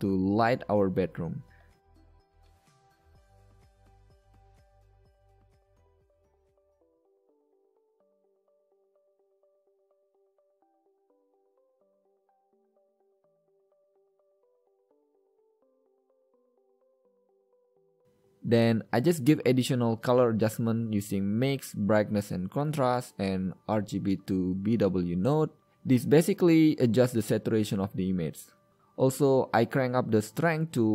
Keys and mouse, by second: 5.4 middle drag, 5.8 middle drag, 10.3 a, 10.7 click, 11.6 g, 12.0 b, 12.3 shift+a, 18.0 g, 18.0 a, 24.0 click, 24.8 shift+a, 28.7 click, 30.2 KP_0.